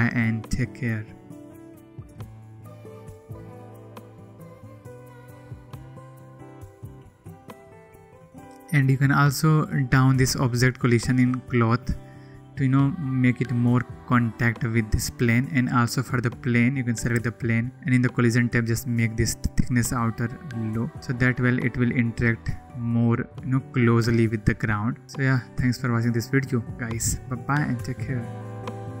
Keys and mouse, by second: 3.4-5.8 drag, 6.0 ctrl+z, 21.1 click, 28.4-29.0 drag.